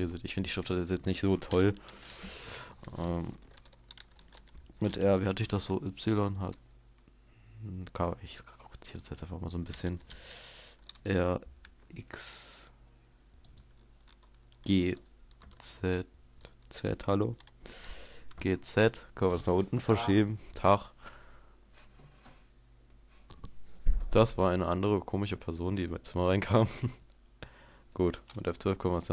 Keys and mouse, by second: 4.9 r, 9.1-11.1 drag, 11.1 r, 13.7-16.1 drag, 14.9 g, 25.0-29.1 middle drag.